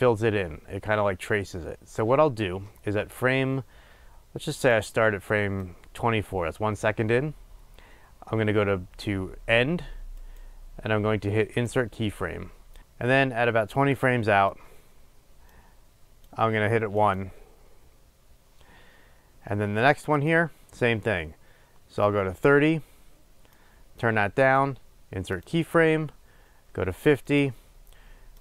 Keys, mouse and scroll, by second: 12.0-12.8 right drag, 12.8-17.4 drag, 22.2 click, 23.8-25.7 drag, 25.7-27.5 right drag, 27.5 click.